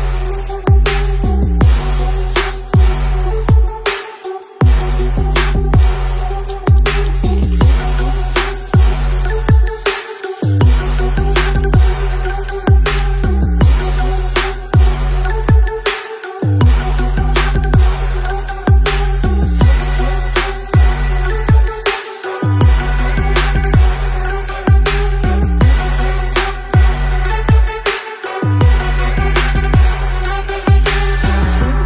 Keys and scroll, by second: 4.7-5.7 typing, 7.7 space, 10.1 space, 14.2 space, 14.3 space, 14.4 space, 14.6 space, 16.2 space, 16.3 space, 16.4 space, 16.8 space, 19.9 space, 19.9 v, 21.6 alt+t, 21.7-25.4 typing, 22.8 ctrl+z.